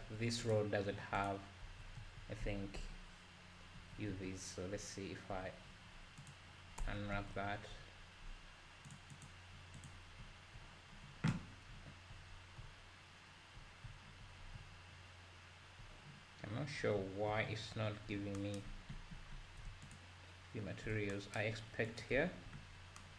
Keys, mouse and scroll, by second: 0.6 click, 0.9-1.3 scroll down 2, 1.3 click, 1.7 Tab, 2.0 a, 2.8 KP_Decimal, 3.8 a, 4.3 z, 6.3 u, 6.9 Tab, 7.3 z, 7.7-8.5 scroll down 1, 8.5-8.9 scroll down 2, 9.2 click, 9.9 click, 10.2 `, 11.0-11.7 scroll down 4, 11.7 `, 12.3 scroll up 3, 12.6 `, 13.8 `, 14.4 scroll up 1, 14.5 `, 16.8 scroll down 2, 17.0 `, 19.9 ctrl+shift+click.